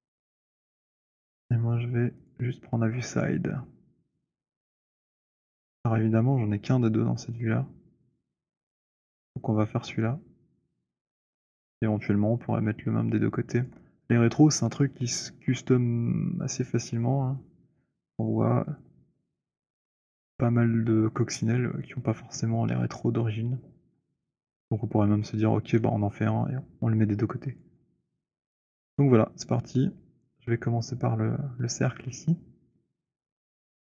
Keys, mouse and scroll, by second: 2.4 click, 4.6 click, 10.8 click, 14.0 alt+click, 24.6-25.3 scroll, 27.8 alt+click, 29.8 alt+click, 32.0 scroll.